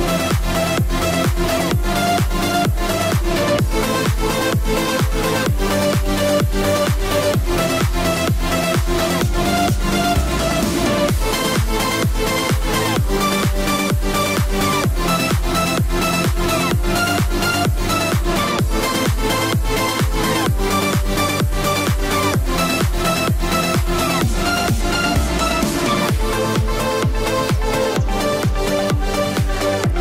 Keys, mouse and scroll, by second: 9.2-11.7 typing, 13.7-16.4 typing, 18.9 space, 20.2-25.1 typing, 27.0 click.